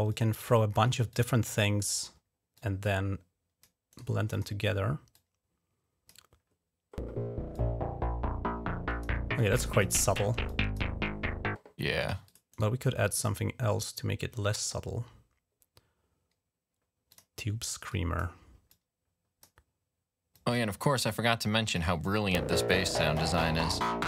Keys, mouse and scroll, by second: 0.6 right click, 0.9 click, 1.8 right click, 2.4-3.5 drag, 3.8 click, 4.2 click, 5.0-6.3 drag, 7.4-9.7 drag, 10.3 click, 11.8 click, 12.1 click, 12.4 right click, 16.9 click, 17.7 click, 18.5 click, 19.3 right click, 20.2 click, 20.4 right click, 20.8 click, 21.6 right click, 22.6 click.